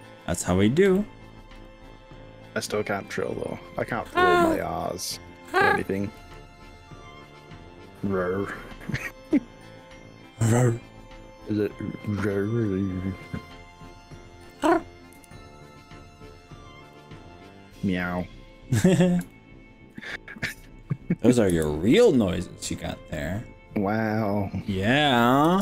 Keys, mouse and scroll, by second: 0.2 middle click, 1.0 shift+middle click, 1.7 middle click, 2.4-3.0 scroll up 3, 3.6 click, 4.2 shift+click, 4.6 middle click, 6.2 g, 8.4 scroll up 2, 8.8-9.4 scroll down 3, 12.2 click, 12.7 middle click, 15.1 KP_1, 16.4 scroll down 4, 17.0-17.5 scroll up 3, 17.9 middle click, 19.3 shift+middle click, 20.4 middle click, 21.6 KP_1, 25.5 g.